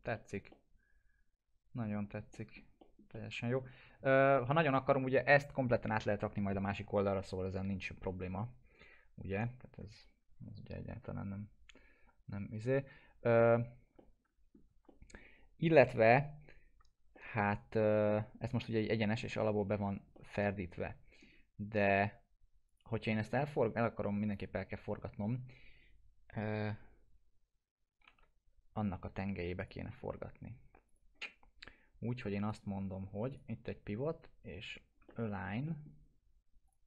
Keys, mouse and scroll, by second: 0.1 middle click, 0.5-2.1 alt+middle drag, 2.8 middle click, 3.1-3.7 alt+middle click, 4.0 ctrl+s, 9.6 scroll up 1, 13.9 scroll up 1, 14.0-14.6 alt+middle click, 14.9 middle click, 16.2 scroll down 1, 17.2-19.2 alt+middle drag, 18.9 middle click, 19.7-20.1 scroll up 1, 20.1-21.4 alt+middle drag, 21.5 scroll up 1, 22.7 click, 23.1 middle click, 24.3 click, 27.8-28.6 typing, 29.6 click, 30.1 scroll down 1, 30.9 click, 35.1-36.0 alt+middle click, 35.9 scroll down 1, 36.7 click.